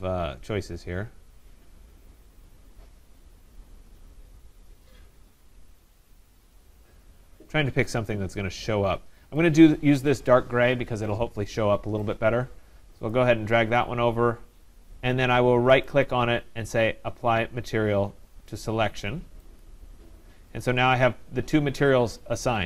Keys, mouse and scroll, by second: 2.8 scroll, 3.6-4.0 scroll, 4.4 scroll, 4.9-6.8 scroll, 6.8 scroll, 7.7-9.5 scroll, 9.5 click, 12.1 scroll, 12.1 middle click, 12.9 click, 13.1 click, 15.9 right click, 19.6 click.